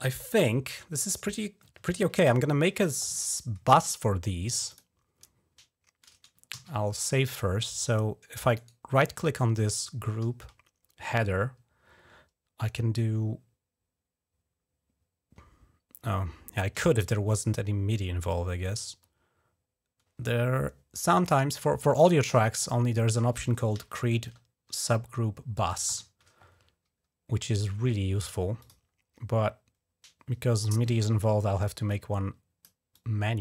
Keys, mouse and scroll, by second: 3.5 click, 4.5 click, 6.3 ctrl+s, 8.3 right click, 21.7 click, 25.7 ctrl+shift+n, 28.4 click, 29.6 scroll down 2, 31.7 click, 32.7 click.